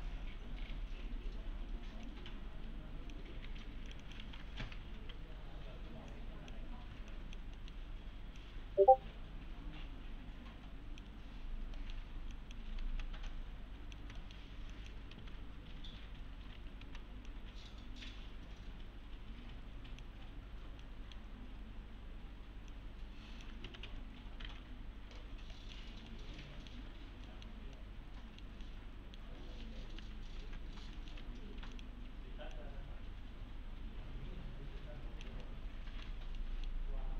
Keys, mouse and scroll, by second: 2.1-3.3 click, 3.4 2, 3.9 click, 5.3 1, 6.1-6.7 click, 7.1 ctrl+click, 7.6 middle click, 8.4-11.2 click, 11.8 middle click, 12.3 click, 12.8 s, 13.3-14.5 click, 14.0 s, 14.2 middle click, 14.7 click, 15.1-16.8 typing, 17.3-20.1 click, 20.3-20.8 scroll up 1, 20.8-21.4 middle click, 21.4 scroll up 1, 22.7-23.6 click, 23.4-24.4 typing, 24.2 scroll down 1, 24.9-25.5 scroll down 1, 25.5 middle click, 25.8 scroll down 1, 26.1-26.7 alt+middle click, 26.9 scroll up 1, 27.3 middle click, 30.4 alt+x, 31.0 middle click, 31.2 2, 31.7 click, 35.4-36.1 alt+middle click, 36.1-36.4 alt+scroll down 2, 36.4 middle click.